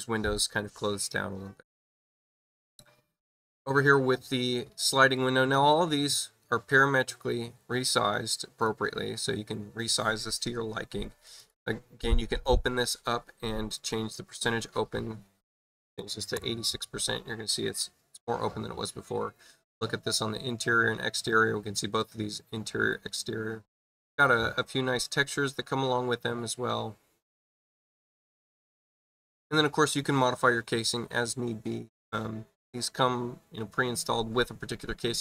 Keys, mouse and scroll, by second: 2.4 click, 5.1 click, 6.7 click, 8.3 click, 11.2 click, 11.4 click, 13.7 click, 23.7 click.